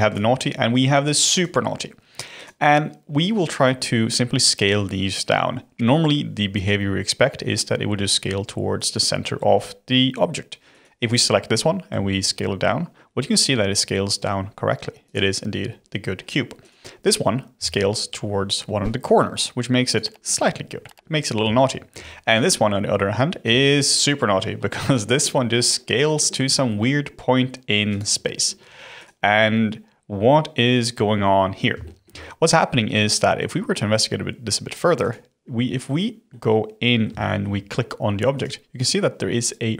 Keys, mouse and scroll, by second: 0.0 click, 1.3 click, 2.3 click, 10.7 click, 11.9 s, 16.6 click, 17.5 s, 21.5-22.2 middle drag, 22.2 click, 25.1 s, 28.9 click, 31.3-31.8 scroll up 1, 31.8-34.8 shift+middle drag, 35.0 click, 35.4-35.9 scroll up 2, 36.2-38.3 middle drag, 38.3 click, 39.4 click.